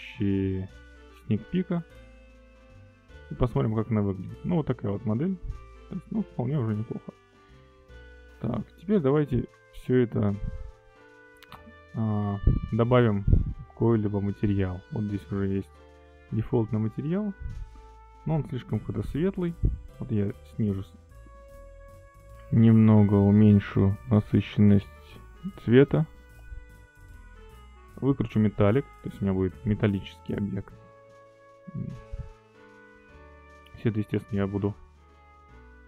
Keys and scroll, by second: 0.2 Escape.